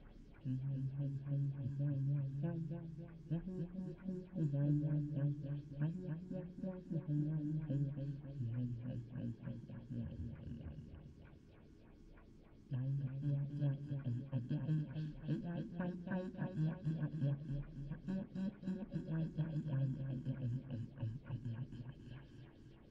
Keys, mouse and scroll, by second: 1.3 l, 4.4 middle click, 8.5 Tab, 12.3 middle click, 12.4 click, 15.6 middle click, 17.1 middle click, 17.4 middle click, 18.8-22.9 typing.